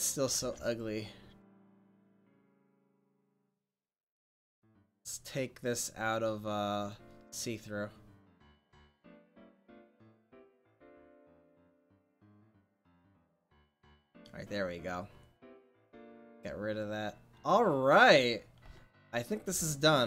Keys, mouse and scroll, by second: 0.4 ctrl+s, 3.8 f, 7.3-8.6 drag, 10.0-12.5 drag, 15.2 click, 19.5 r.